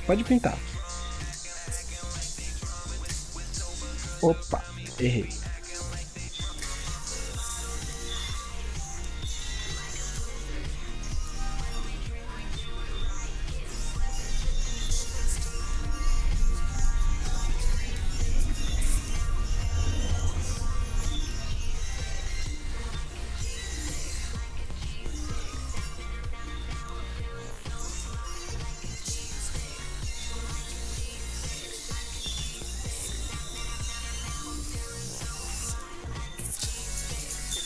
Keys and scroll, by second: 4.7 ctrl+z.